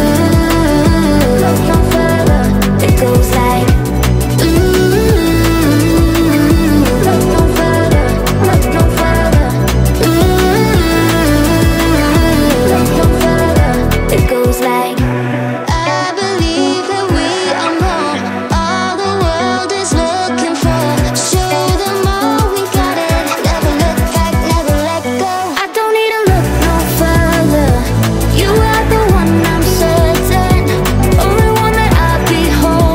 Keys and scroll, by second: 1.1 space, 19.9 0, 20.4 space, 20.6 1, 20.9 2, 22.0-25.0 typing, 25.2 Return.